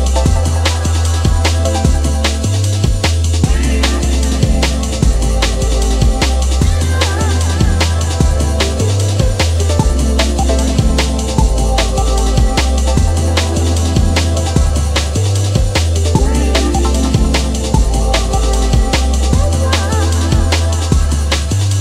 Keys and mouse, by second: 1.0 click, 3.0 click, 4.0 click, 5.2 alt+click, 9.4 click, 10.4 space, 12.4 click, 13.7 click, 14.3 alt+middle click, 14.9 click, 16.0 space, 17.4 space, 18.0 click, 20.1 space.